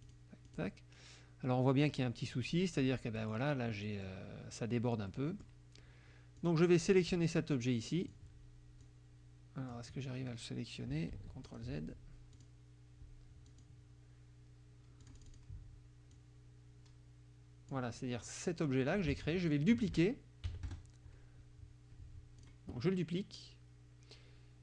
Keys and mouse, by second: 0.1 click, 0.5 click, 1.8 click, 2.3 click, 3.7 middle click, 5.1 click, 6.4 click, 7.0-8.3 drag, 8.8 click, 11.1 ctrl+z, 11.5 ctrl+click, 12.3 click, 13.5 click, 15.0 click, 16.2-17.9 drag, 19.1 ctrl+z, 19.5 ctrl+click, 20.5 KP_Subtract, 20.7 KP_Add, 22.5 click.